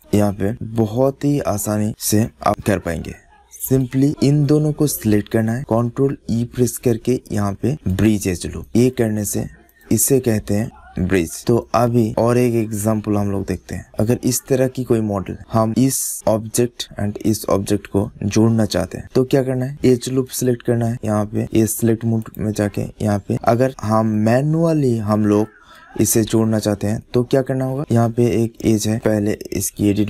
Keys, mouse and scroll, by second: 0.5 click, 1.4 click, 1.6 middle click, 2.6 middle click, 3.5-6.1 drag, 6.1 ctrl+e, 8.5 click, 8.7 middle click, 9.5 click, 10.4 click, 13.2 middle click, 13.4 middle click, 13.6 middle click, 13.8 middle click, 14.0 middle click, 15.4 middle click, 16.1 middle click, 17.5 middle click, 18.2 middle click, 18.8 middle click, 19.2 middle click, 20.1-21.6 drag, 21.6-22.7 middle drag, 23.4 middle click, 23.6 middle click, 24.4-27.5 middle drag, 27.8 click, 28.2-29.2 middle drag, 28.9 Tab, 29.9 click.